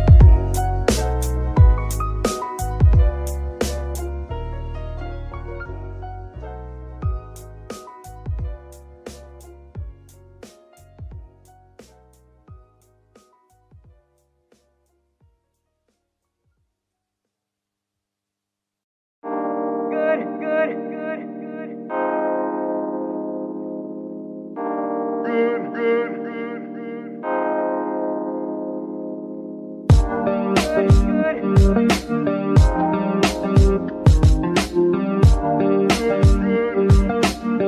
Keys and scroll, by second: 8.0 ctrl+shift+z, 12.3 ctrl+c, 14.0 z, 17.2 -, 17.6 ctrl+v, 18.2 ctrl+Return, 22.1 -, 22.3 ctrl+v, 22.5 ctrl+Return, 27.7 Escape, 28.2 g, 28.8 Escape, 29.9 g, 30.6 Escape, 31.0 g, 32.9 g, 33.6 Escape, 34.2 r, 34.4 r, 35.6 Escape, 36.3 r, 37.5 Escape.